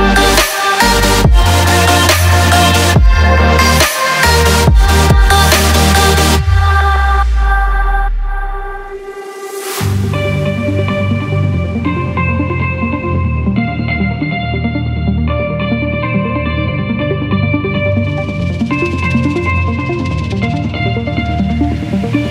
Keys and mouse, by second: 0.1 ctrl+drag, 0.5 shift+click, 1.0 ctrl+click, 7.2 click, 8.7-10.9 drag, 13.6 click, 17.8-22.3 drag.